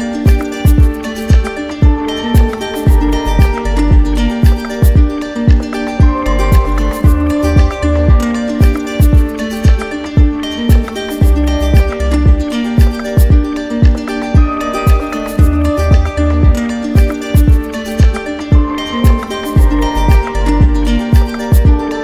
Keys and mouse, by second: 0.4 shift+click, 1.5 shift+click, 3.7 click, 4.1 right click, 5.0 alt+right click, 6.2 alt+right click, 8.8 alt+right click, 10.3 alt+click, 13.5 z, 15.0 click, 16.5 alt+click, 17.3 w, 18.5 ctrl+click, 20.2 right click.